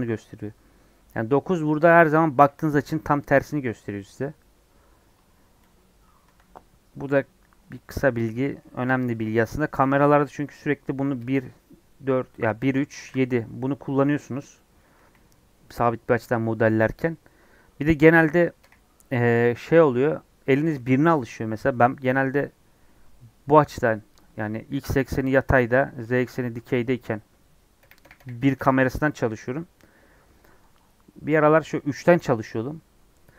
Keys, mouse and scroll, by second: 7.8 middle click, 8.2 scroll up 2, 8.5-11.1 middle drag, 11.1 KP_1, 18.5 KP_1, 23.9 scroll down 2, 24.1 scroll up 2, 24.7-26.1 scroll up 2, 27.7-28.5 typing, 31.2 KP_3.